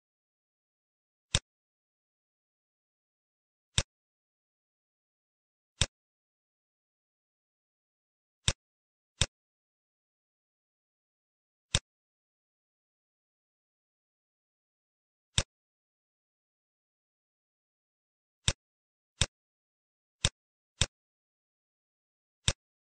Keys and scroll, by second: 10.0 t, 12.9 BackSpace.